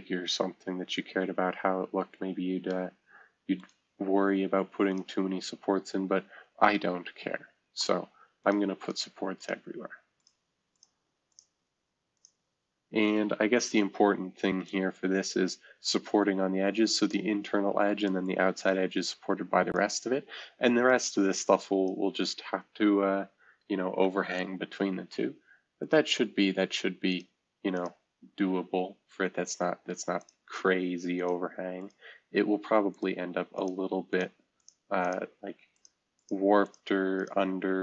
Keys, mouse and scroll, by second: 3.6 click, 4.9 click, 6.4-7.8 scroll down 2, 7.8 click, 8.4 drag, 8.9 click, 9.4 click, 10.2 click, 10.7 click, 11.3 click, 12.1 click, 13.0 click, 13.6 F2, 14.6-19.8 drag, 20.9-23.5 drag, 23.5 shift+F2, 24.0 F2, 25.8-27.2 drag, 27.7 click, 28.8-30.2 scroll down 1, 30.2 click, 31.2 click, 31.8 click, 32.9 drag, 33.5 click, 34.1 click, 34.6 click, 35.0 click, 35.7 click, 36.2 click, 36.6 click, 37.2 click.